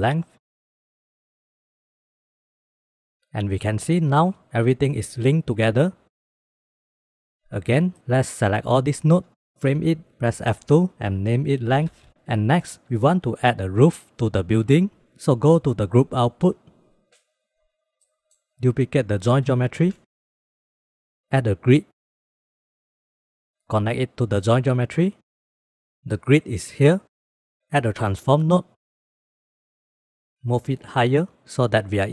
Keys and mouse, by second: 0.0 click, 0.2 click, 0.4 click, 0.6 click, 0.8 click, 1.1 click, 1.5 click, 1.7 click, 2.7-4.0 drag, 4.1-5.7 drag, 6.2 click, 7.8 click, 8.6-9.2 drag, 9.8 ctrl+j, 10.3 F2, 12.1 ctrl+s, 15.9 click, 16.4 click, 17.1 click, 18.0-18.5 drag, 19.0 shift+d, 20.2 click, 20.6 middle click, 20.9 g, 21.4 shift+a, 24.0-24.8 drag, 25.2-25.7 middle drag, 25.9 middle click, 26.1 shift+middle click, 27.9 shift+a, 30.9-31.9 drag.